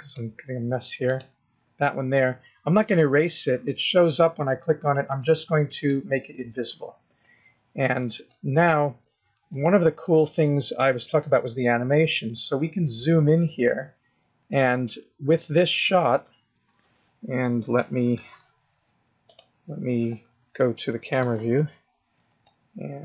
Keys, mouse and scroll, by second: 1.1 click, 5.7 click, 7.2 middle click, 8.5-9.2 scroll down 2, 9.5 shift+middle click, 10.2 middle click, 11.0 scroll up 3, 12.3 middle click, 13.1 scroll up 2, 13.8 shift+middle click, 20.1 KP_0, 21.2 click, 22.4 shift+middle click.